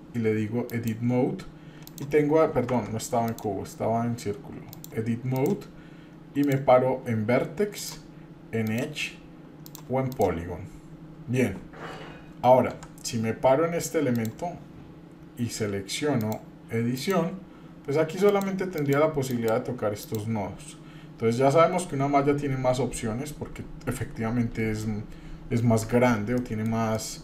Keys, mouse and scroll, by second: 1.8 click, 2.7 Tab, 3.3 click, 4.7 click, 6.4 click, 7.8 click, 8.6 click, 9.6 click, 10.1 click, 12.7 Tab, 14.1 click, 16.2 click, 18.3 click, 18.7 click, 19.3 click, 20.0 click, 26.4 shift+middle click, 26.9 middle click.